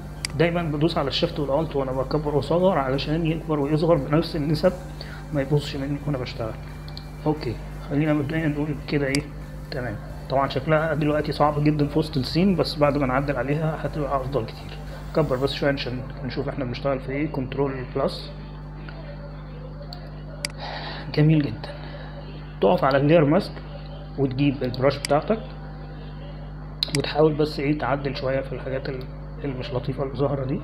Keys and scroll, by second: 16.7 ctrl+=, 17.1 ctrl+=, 17.5 ctrl+=, 18.1 ctrl+=, 19.9 space, 29.3-30.3 typing.